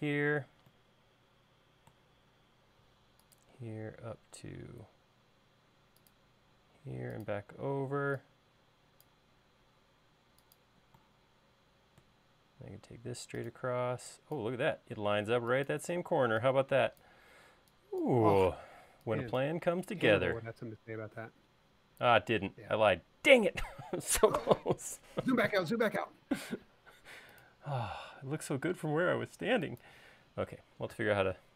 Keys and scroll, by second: 7.7 e, 9.6 l, 13.8 e, 26.2 l, 28.6 e.